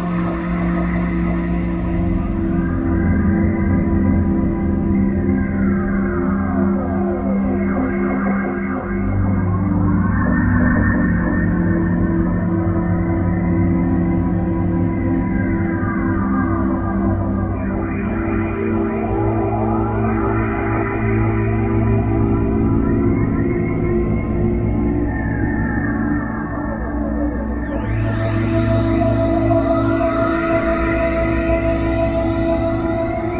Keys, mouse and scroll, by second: 2.1 click, 3.0 click, 8.7 right click, 9.7 click, 12.9 right click, 14.7 r, 15.0 click, 16.1 click, 17.4 click, 22.3 right click, 23.4 click.